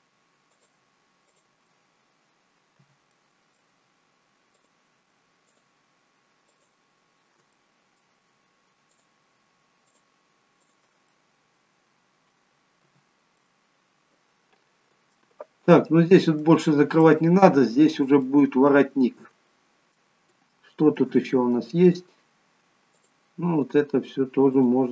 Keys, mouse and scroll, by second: 2.9 shift+click, 2.9 f, 3.3 middle click, 4.6 click, 5.5 shift+click, 7.5 shift+click, 7.5 middle click, 8.9 shift+click, 10.6 shift+click, 11.1 shift+click, 11.1 middle click, 12.9 f, 13.4 middle click, 15.7 middle click, 17.0 middle click, 18.8 shift+middle click, 19.6 shift+middle click, 20.3 shift+middle click, 21.2 middle click, 23.0 click, 24.6 shift+click.